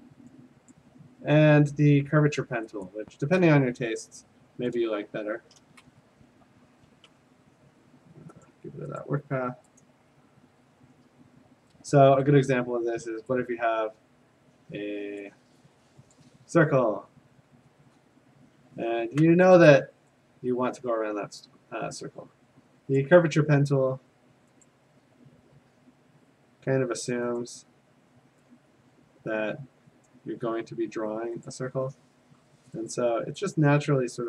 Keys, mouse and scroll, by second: 0.7 click, 2.9 click, 4.7 click, 5.2 Escape, 6.1 alt+BackSpace, 6.9 ctrl+z, 8.5 click, 9.0 click, 9.9 click, 15.2 click, 16.2 click, 18.1 click, 23.0 click, 24.6 click, 27.4 click, 30.1 click, 31.5 click, 32.9 click, 33.6 click.